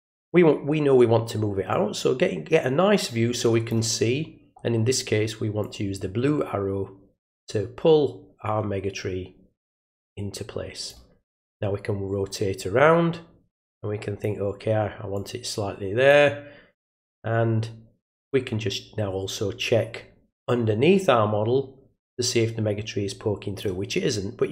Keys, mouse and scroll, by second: 1.7-3.7 drag, 5.6-10.9 drag, 11.4-14.2 drag, 15.1 click, 20.4-23.6 drag.